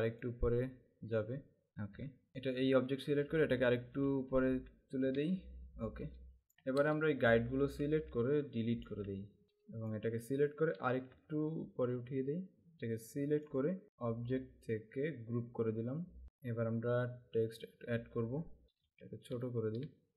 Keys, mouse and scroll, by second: 0.2 click, 1.7 Up, 2.0 Down, 2.4 click, 4.2 Up, 5.1 Down, 6.9 click, 7.9 Delete, 8.5 click, 8.9 Delete, 9.4 space, 9.8 click, 11.2 Up, 13.0 click, 15.6 click, 17.7 click, 19.5 alt+shift+click.